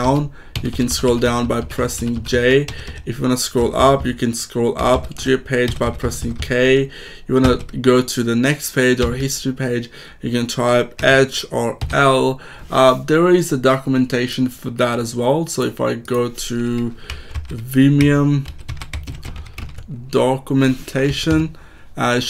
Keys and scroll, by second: 2.6 h, 3.5 k, 8.5 h, 8.9 l, 10.9 h, 11.7 l, 17.0-19.5 typing, 21.0 Down, 21.2 Return.